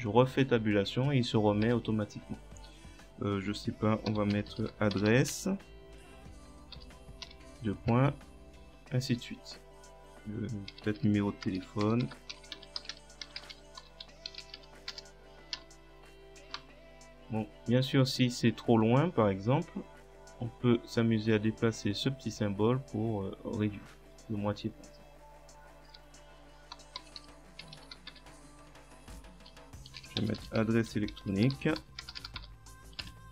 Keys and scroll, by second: 9.3 Return, 10.5-15.5 typing, 16.6 Tab, 25.9 Return, 26.5-33.0 typing.